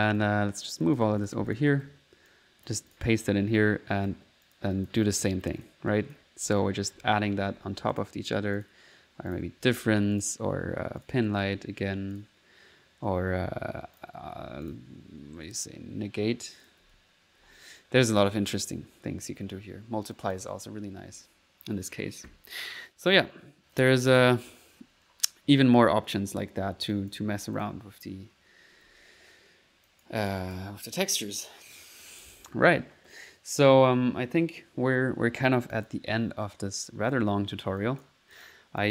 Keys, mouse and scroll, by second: 0.2 click, 0.8 click, 1.2 click, 1.5 click, 1.7 ctrl+v, 2.3-3.5 ctrl+drag, 3.6 ctrl+click, 4.4 click, 4.7 click, 5.2-6.4 drag, 6.4-7.6 typing, 7.9 click, 8.5 click, 9.3 click, 9.7-11.3 typing, 10.1 click, 11.0 click, 12.1 click, 13.9 click, 14.5 1, 14.6 click, 16.6 click, 16.9 click, 17.5 typing, 18.0 click, 18.6 click, 19.0-20.9 typing, 20.1 click, 22.5 click, 23.7 click, 26.9 click, 27.3 1, 27.5 click, 28.7-29.4 typing, 29.8 ctrl+click, 35.5 middle click, 35.7 click, 37.1 click, 37.8 click, 38.3 click, 38.8 click.